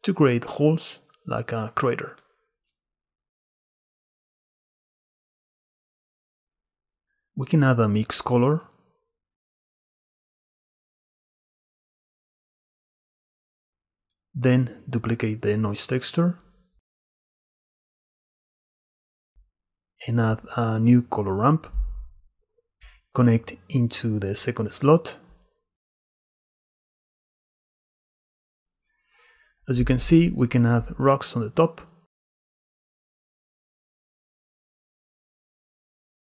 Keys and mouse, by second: 0.4-2.2 drag, 2.4 click, 5.4 click, 6.2 click, 7.4 shift+a, 13.7 x, 14.4 click, 18.0 shift+d, 20.4 shift+a, 23.0-23.6 drag, 24.4-25.9 drag, 27.8 click, 28.8-29.2 drag, 29.2-31.5 middle drag, 31.5 click, 31.5 middle click, 31.7 click, 33.1-34.3 middle drag, 34.3 click, 34.6 middle click, 35.1-36.3 middle drag.